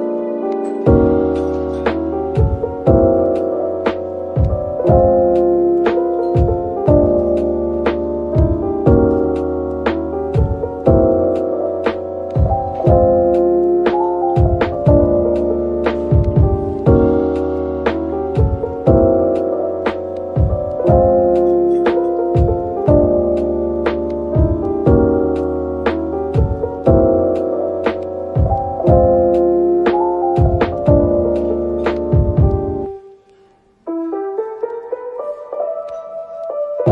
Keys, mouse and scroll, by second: 0.7-3.5 typing, 4.6-5.0 typing, 9.4 ctrl+r, 10.9 double click, 12.3 typing, 13.5 typing, 15.7 typing, 16.8 double click, 17.7 typing, 18.7 typing, 21.3 typing, 22.7 Tab, 22.9 middle click, 26.0 Tab, 27.1 middle click, 27.6 typing, 32.0 Return, 33.6 typing, 34.4 shift+click, 35.7 typing.